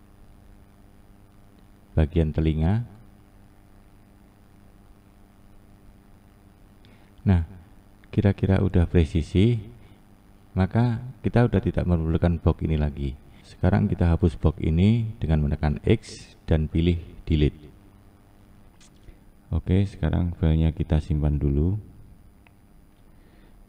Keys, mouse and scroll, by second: 0.4 click, 5.1-5.6 scroll down 5, 5.6-6.4 scroll up 2, 6.4-8.1 scroll up 1, 17.8 x, 18.8-19.6 scroll up 4, 19.6 scroll down 2, 19.8-20.8 scroll up 1, 20.8-21.1 scroll down 2, 23.2-23.6 scroll up 1.